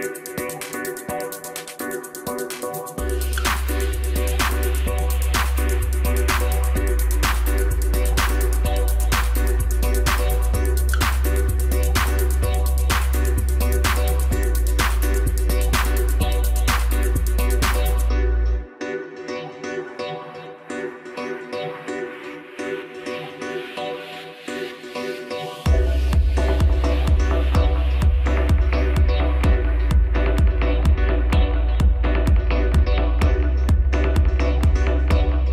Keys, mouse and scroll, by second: 0.3-0.9 middle drag, 0.9 click, 2.2 KP_7, 3.1-5.7 right drag, 5.7 KP_1, 7.4 shift+d, 10.9 middle click, 11.2 scroll down 2, 11.9 KP_7, 12.7 scroll up 1, 14.1 click, 15.8-18.9 drag, 19.0 scroll down 2, 19.2-21.4 middle drag, 21.4 scroll up 1, 22.0 KP_1, 22.6 scroll up 1, 23.2 shift+click, 25.0 shift+d, 29.1 scroll down 1, 29.3-31.2 middle drag, 31.2 shift+drag, 31.8 shift+click, 32.7 KP_7, 33.2-34.6 scroll down 4, 34.6-35.5 scroll up 1.